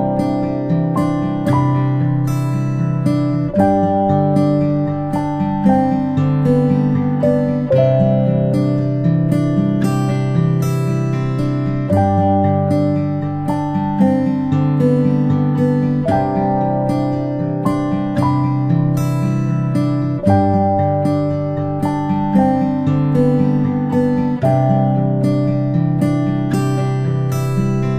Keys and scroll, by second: 10.6 ctrl+z, 16.8-17.2 ctrl+space, 19.3 ctrl+shift+[, 19.9 ctrl+], 20.5 ctrl+], 23.9 ctrl+[, 24.4 ctrl+[.